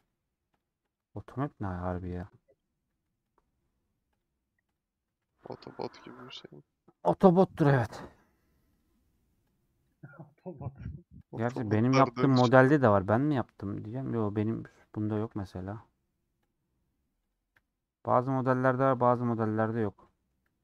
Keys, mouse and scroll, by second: 0.0 click, 1.4 h, 4.2 click, 5.0 h, 8.8 click, 10.0 h, 11.3 click, 12.5 h, 16.5 click, 17.5 h, 20.0 middle click, 20.4 h.